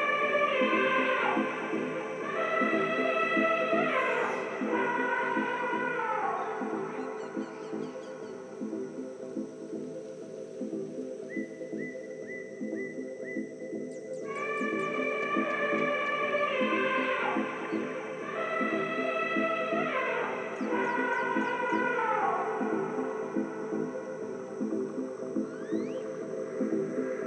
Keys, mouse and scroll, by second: 0.9 a, 3.7 middle click, 4.9 z, 7.1 middle click, 15.5 ctrl+KP_1, 16.6 z, 17.0-19.7 middle drag, 20.9-23.8 middle drag, 23.5-25.4 right drag, 24.2-26.2 middle drag, 27.0-27.2 right drag.